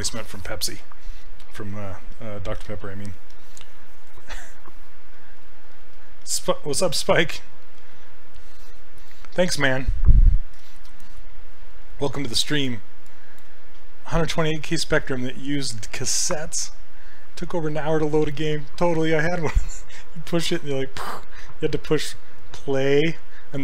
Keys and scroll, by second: 2.1 s.